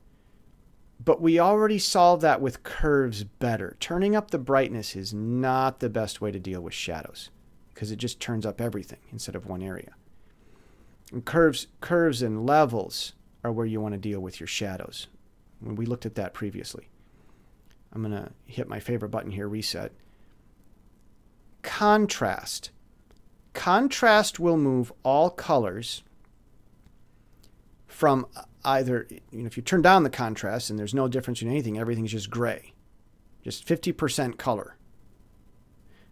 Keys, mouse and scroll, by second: 4.3-11.3 drag, 11.9 click, 16.0 click, 19.0 click, 27.9-36.1 drag.